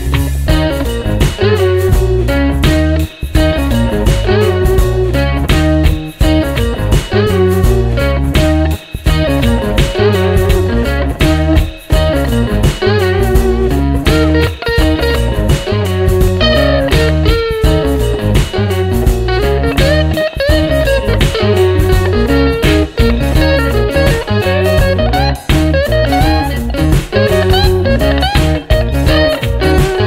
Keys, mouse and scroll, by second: 3.7 click, 4.7 ctrl+d, 7.5 click, 8.6-9.6 drag, 9.7 click, 10.5-11.8 drag, 12.2-13.7 drag, 13.8 click, 14.5 click, 15.5 click, 16.4-17.7 drag, 17.9-19.7 drag, 20.6 click, 21.2 click, 23.4 click, 24.4 ctrl+d, 24.9-25.8 ctrl+drag, 26.5 click, 27.7 click, 28.6-30.0 drag.